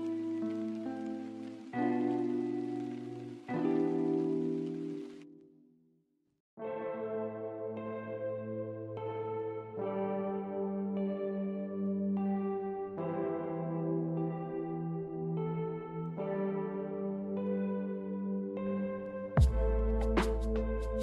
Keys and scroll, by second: 3.7 ctrl+z, 6.2 m, 10.6 b, 13.7 m, 16.2 a.